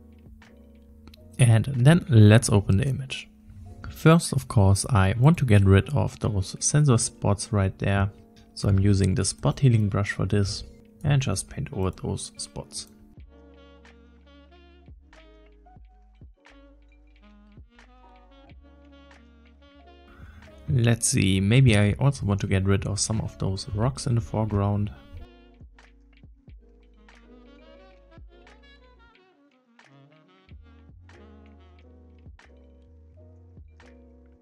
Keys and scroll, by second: 10.5 \.